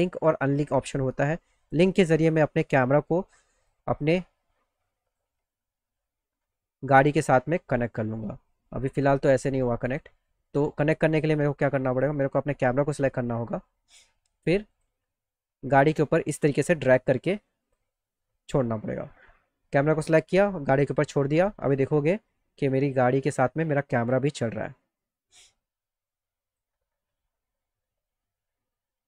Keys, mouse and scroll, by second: 1.7 click, 2.7-3.7 drag, 5.1 click, 7.4-9.4 drag, 9.9 click, 10.5 click, 14.7 click, 16.1-17.8 drag, 21.3 click, 22.4 click, 23.9-26.6 drag, 28.8-29.0 drag.